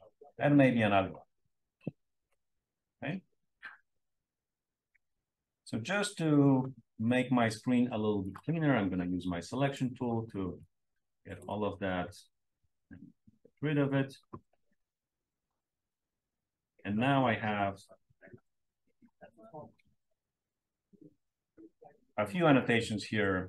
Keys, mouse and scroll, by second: 0.1-1.3 drag, 2.9-4.1 scroll up 1, 4.1-6.2 scroll down 1, 8.1-9.7 drag, 10.6 click, 12.5 BackSpace, 13.7 click, 14.9-15.9 scroll up 2, 18.5-19.6 drag.